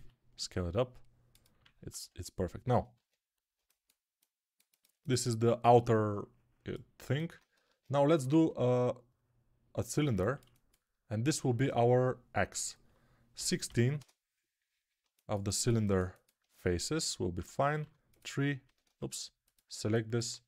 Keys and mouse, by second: 1.4-13.9 ctrl+middle drag, 1.5 ctrl+Tab, 3.0 ctrl+Tab, 7.5 ctrl+Tab, 8.2 shift+a, 13.9-15.6 drag, 15.6-17.2 alt+shift+right drag, 17.2 Tab, 17.2-19.7 drag, 17.7 3, 18.7 ctrl+z, 19.7-20.4 alt+middle drag.